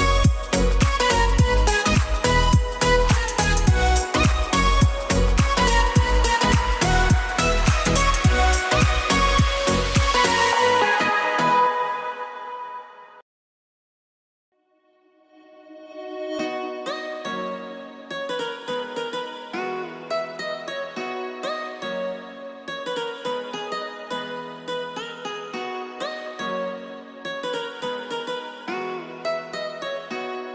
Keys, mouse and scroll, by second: 1.3 click, 1.5 s, 2.5 click, 3.1-4.5 middle drag, 5.1 click, 6.1 shift+a, 7.9 s, 8.9 g, 9.1 z, 10.0 click, 10.1 KP_1, 11.1 s, 11.3 z, 12.3 click, 12.6 g, 14.0 click, 14.4 d, 14.7 y, 16.7 right click, 17.3 g, 17.5 y, 21.0 drag, 21.3-21.7 middle drag, 22.1 s, 22.5 y, 24.0 click, 24.4 g, 24.6 y, 25.3 click, 25.6 r, 26.0 z, 27.8-28.7 middle drag, 29.2 r, 29.5 z.